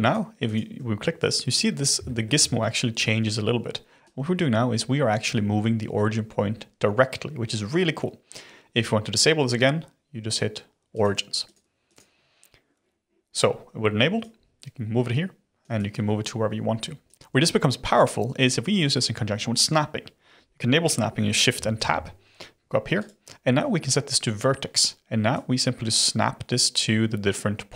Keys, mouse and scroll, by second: 0.0 click, 0.4 click, 2.0-2.4 shift+middle drag, 2.4-2.8 scroll up 4, 4.0 click, 10.2 click, 10.9 click, 11.4 click, 11.8 click, 14.2 drag, 15.7 click, 21.7 shift+Tab, 22.9-25.3 drag.